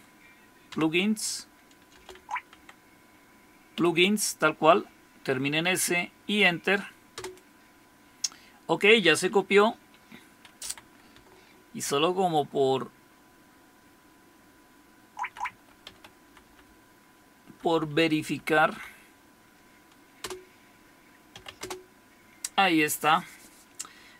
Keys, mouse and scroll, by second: 0.4-4.3 typing, 7.2 Return, 10.6 Up, 11.1 BackSpace, 11.6-14.2 Left, 14.3-15.3 Left, 15.4 Right, 15.8 d, 16.2 Delete, 16.4 Delete, 16.7-17.6 Delete, 17.7 Delete, 17.9 Delete, 18.3 Delete, 20.2 Return, 21.1-21.9 typing.